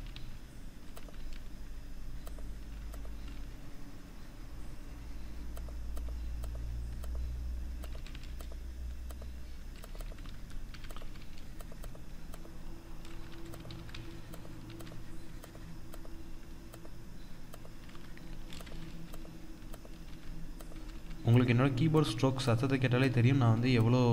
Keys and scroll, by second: 12.8 ctrl+-.